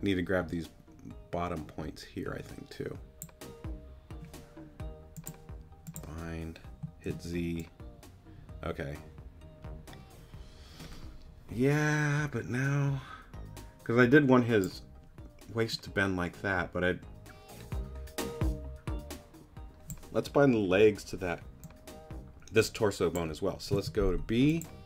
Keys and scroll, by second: 7.1 z, 23.7 b.